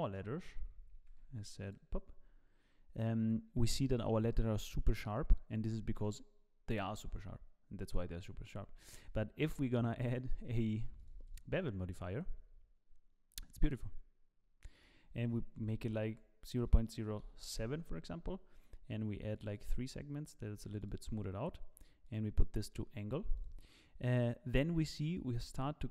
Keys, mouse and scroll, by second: 0.1 shift+middle click, 1.0 ctrl+b, 2.2-4.1 scroll up 4, 4.1-5.0 scroll up 2, 5.9 click, 7.5-8.6 scroll down 3, 8.6 scroll down 1, 8.6 scroll up 2, 10.0 click, 11.0 click, 11.4 click, 14.7 click, 19.3 click, 19.6 click, 21.0 click, 22.9 click.